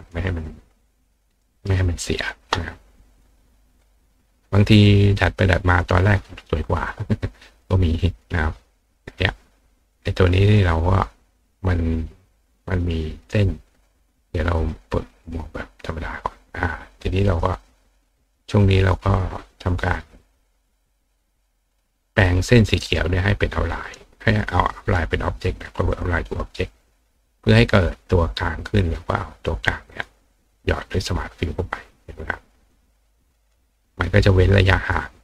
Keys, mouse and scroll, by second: 1.0 click, 1.4 right click, 2.2 click, 3.1 click, 3.8 click, 6.8 click, 7.5 click, 9.1 click, 9.9 click, 10.4 click, 14.6 click, 15.2 click, 17.2 click, 24.4 click, 25.9 click, 29.9 click, 30.8-32.7 drag, 33.4 click.